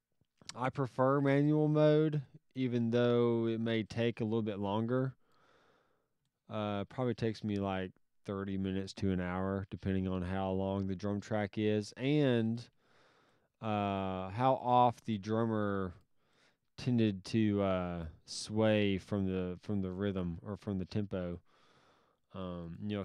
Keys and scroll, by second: 1.3 alt+s, 4.1 alt+s, 12.7 alt+s, 14.8 s, 22.8 s.